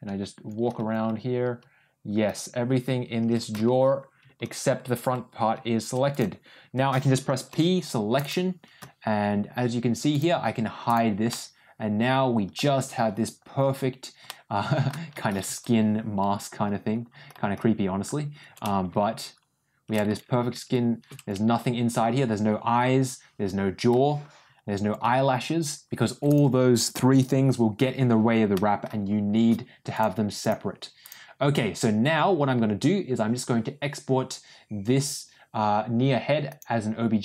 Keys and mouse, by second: 7.4 p, 10.8 click, 11.2-12.4 middle drag, 14.2 middle click, 28.4 middle click, 29.9 click, 36.4-37.2 drag.